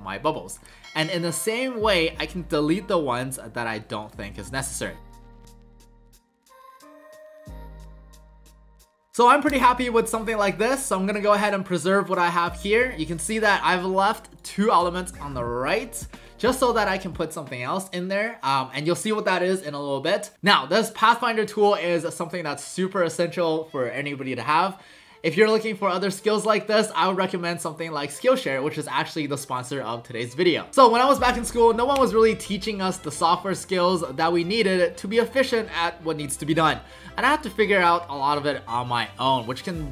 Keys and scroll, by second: 5.2 Delete, 5.3 Delete, 5.6 Delete, 5.7 Delete, 5.9 Delete, 6.4 Delete, 6.7 ctrl+z, 6.9 Delete, 8.1 ctrl+z, 8.4 ctrl+z, 8.6 Delete, 8.7 Delete.